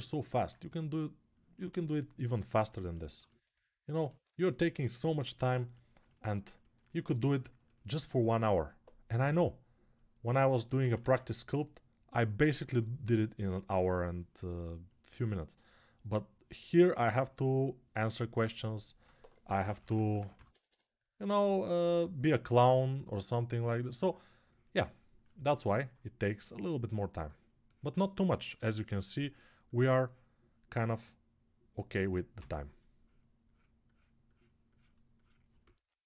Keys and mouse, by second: 4.2-5.8 alt+right drag, 5.8 ctrl+alt+click, 5.8 ctrl+alt+right click, 6.0-36.0 alt+shift+drag, 6.8 alt+q, 9.0 s, 10.5 ctrl+z, 10.7 ctrl+z, 19.4 [, 32.1 s.